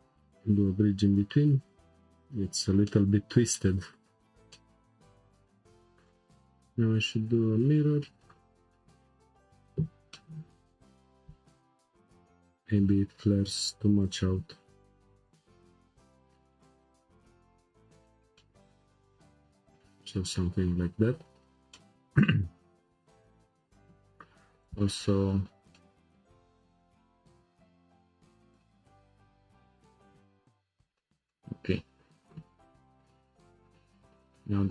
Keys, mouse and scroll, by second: 0.0-0.4 right drag, 1.6-2.9 drag, 2.9-5.0 middle drag, 5.0-7.4 drag, 7.7-8.3 drag, 10.1-11.6 middle drag, 11.6 alt+click, 12.7 g, 15.3 alt+click, 16.6 r, 18.4-21.3 middle drag, 21.7-23.7 middle drag, 24.6 click, 25.7 middle click, 26.7 alt+shift+click, 27.0-28.6 right drag, 28.6-30.4 middle drag, 30.4 Tab, 30.6-31.0 scroll down 2, 31.0-34.3 shift+middle drag.